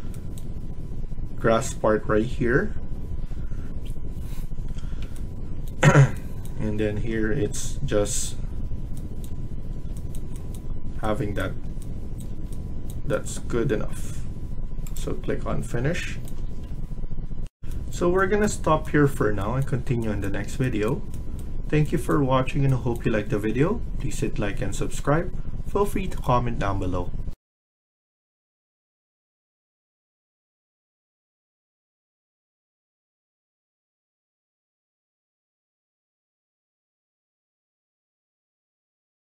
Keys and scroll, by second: 17.3 F1.